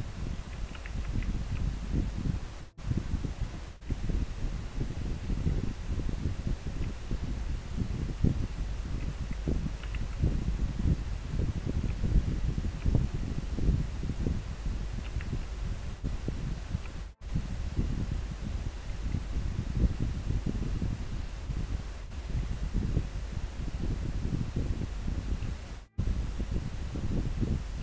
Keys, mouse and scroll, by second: 1.2 scroll down 1, 4.0 scroll up 1, 6.9 scroll up 1.